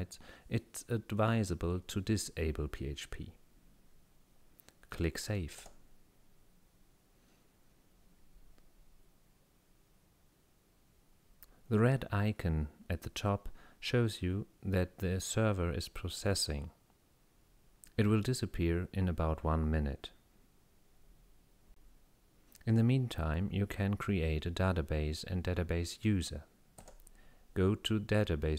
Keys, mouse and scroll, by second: 5.6 click, 26.8 click.